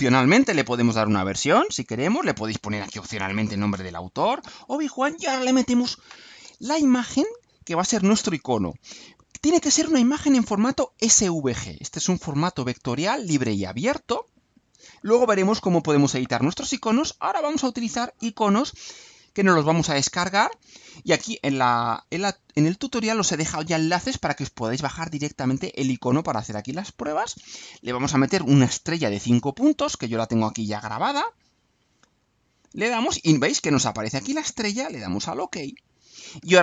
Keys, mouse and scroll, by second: 0.2-1.1 typing, 2.2 click, 2.8-4.2 typing, 25.3 click, 27.9 click, 32.0 click, 35.0 click.